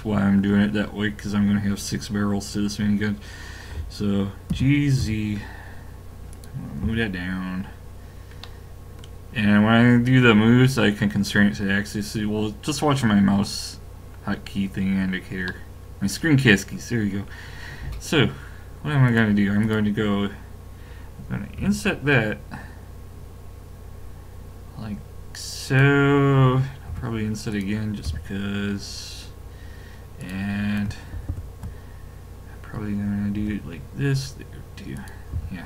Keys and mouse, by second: 4.5 g, 6.8 a, 8.4 middle click, 13.2-17.9 middle drag, 19.1-21.5 drag, 21.6 i, 26.9 i, 28.1 a, 30.2 click, 31.1 ctrl+KP_Add, 31.5 ctrl+KP_Add, 33.4 i, 35.3 a.